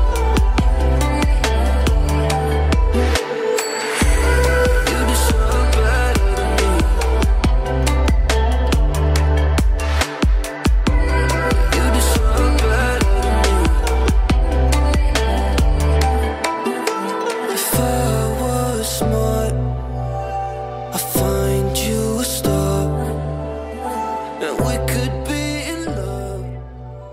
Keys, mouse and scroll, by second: 1.5 ], 1.6 ], 1.8-2.4 click, 10.6-14.8 typing, 11.8-12.2 click, 13.1-13.5 click, 14.0-14.5 click, 15.0 click, 15.9 alt+scroll down 1, 16.5-17.0 alt+scroll up 1, 17.5 alt+scroll up 1, 18.1 space, 18.2-18.6 click, 18.4 space, 18.8-19.3 alt+scroll up 1, 20.4 alt+scroll down 1, 21.5-22.0 typing, 22.5 click, 23.5 alt+scroll down 1, 23.7 alt+scroll up 1, 24.6 Return.